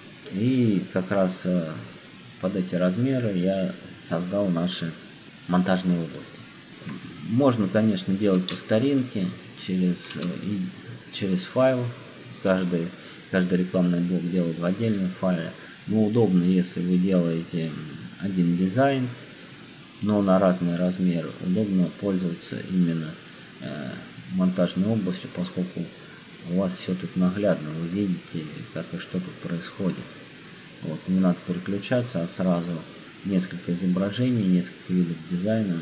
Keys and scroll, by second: 8.9 space.